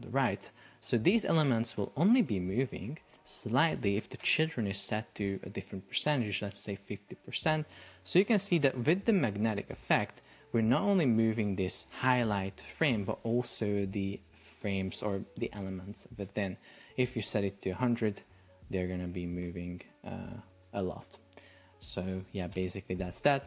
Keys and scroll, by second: 4.1 Return, 16.0 Escape, 17.3 Return, 17.8 super+p, 20.7 Escape, 22.5 Return.